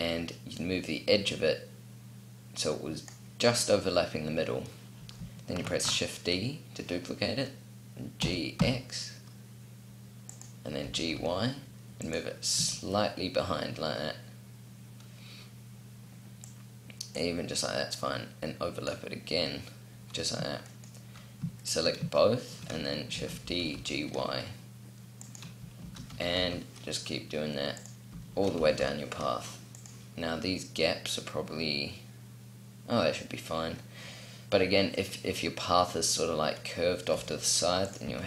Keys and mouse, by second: 5.4 shift+d, 10.5 g, 12.3 z, 16.2 click, 16.8-20.4 drag, 21.3-22.8 middle drag, 22.8 shift+d, 25.1 click, 25.6 shift+d, 26.9 click, 28.1 shift+d, 36.9 r, 37.7 click, 37.9 shift+d.